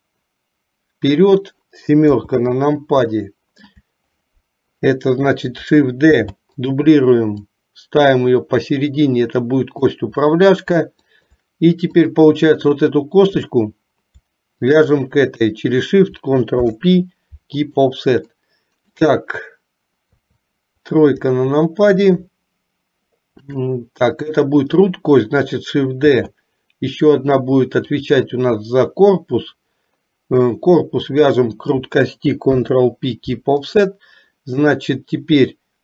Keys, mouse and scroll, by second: 2.2 KP_7, 3.3 shift+middle click, 6.2 shift+d, 7.7-9.9 drag, 11.3 shift+click, 12.2 click, 16.7 ctrl+p, 18.6 middle click, 20.3 KP_3, 21.5 shift+middle click, 26.2 shift+d, 32.7 ctrl+p.